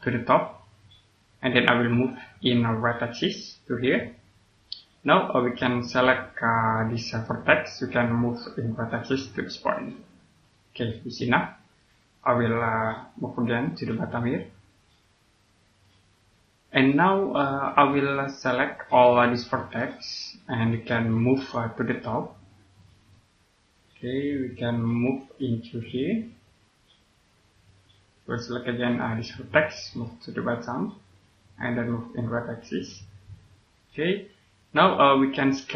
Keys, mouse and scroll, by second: 6.4 right click, 8.3 click, 10.7 scroll down 1, 11.7 right click, 12.5 scroll up 1, 13.5 click, 16.4 scroll down 1, 17.2 middle click, 17.4 scroll down 1, 17.8 middle click, 18.2 click, 18.9 right click, 20.2-20.6 scroll down 1, 20.6 click, 23.0 middle click, 23.9 click, 28.3 right click, 29.9 click.